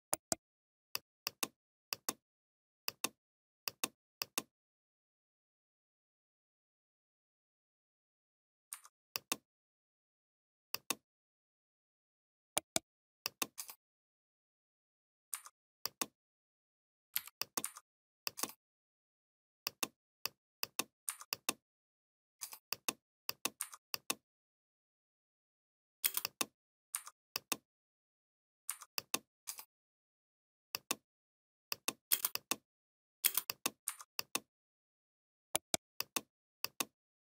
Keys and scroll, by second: 17.0 v, 25.8 space, 31.9 space.